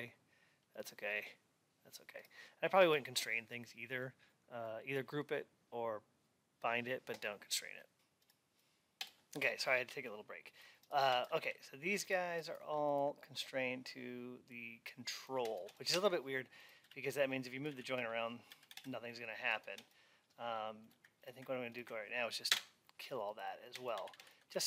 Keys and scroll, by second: 22.4 Delete, 23.8 alt+x.